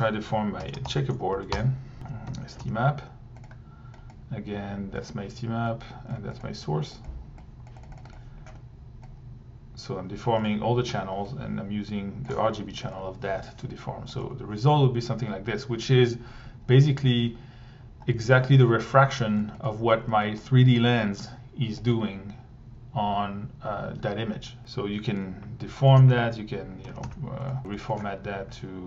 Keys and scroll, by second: 0.0-2.6 typing, 1.5 Return, 2.0 Tab, 7.9 1, 12.9 1, 14.2 1, 21.9 1, 26.0 Tab, 26.6-27.5 typing, 27.6 Delete.